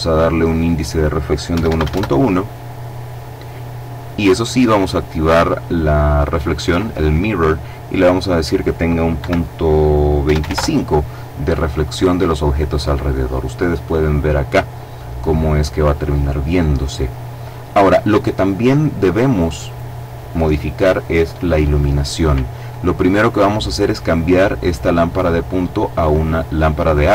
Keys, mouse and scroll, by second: 0.9 KP_1, 1.1 KP_Decimal, 1.2 KP_1, 1.3 KP_Enter, 2.2-2.8 scroll down 2, 2.8 scroll down 1, 3.6 click, 4.3 click, 7.3 click, 8.6 KP_Decimal, 9.6 KP_2, 9.8 KP_5, 9.9 KP_Enter, 11.2-12.2 scroll up 2, 15.9-16.4 scroll down 1, 16.4-17.0 scroll up 1, 17.0-18.4 scroll down 1, 18.4-19.0 scroll down 1, 19.0 right click, 25.9 click.